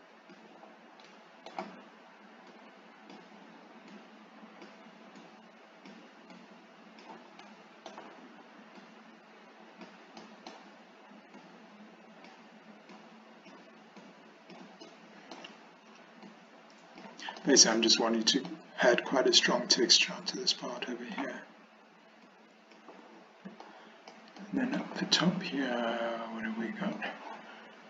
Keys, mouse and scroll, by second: 1.1 middle click, 2.6 click, 4.0 click, 5.2 click, 6.4 click, 7.5 middle click, 8.8-9.9 drag, 10.3 middle click, 11.4 click, 13.0 click, 14.0 click, 14.9 middle click, 16.3 click, 17.4-18.6 middle drag, 19.5 click, 20.8 middle click, 22.3 click, 23.7 shift+middle click, 24.4 shift+middle click, 27.1 click.